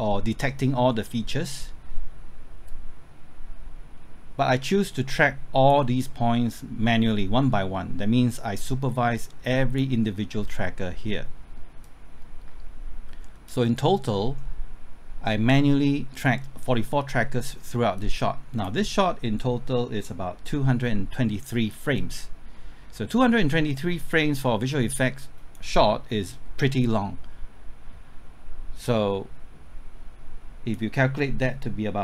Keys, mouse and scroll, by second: 2.6-13.7 drag, 13.7 middle click, 17.9-32.0 drag.